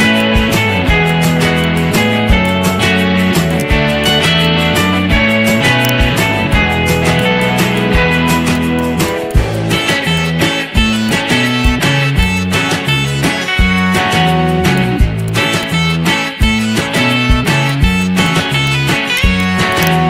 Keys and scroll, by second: 3.0 ctrl+v, 10.0 z, 17.5 z.